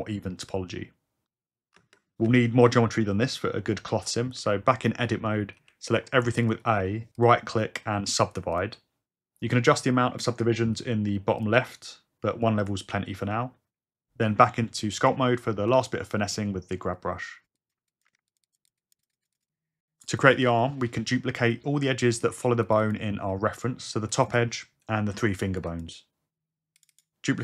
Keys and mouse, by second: 1.2 Tab, 5.6 a, 6.6 click, 8.5 click, 11.4 click, 13.3 Tab, 14.4 f, 15.2 g, 15.7 f, 17.2 f, 20.1 click, 20.5 Tab, 22.6 click, 22.8 click, 24.1 shift+click, 24.3 shift+click, 25.7 shift+click, 26.9 shift+click.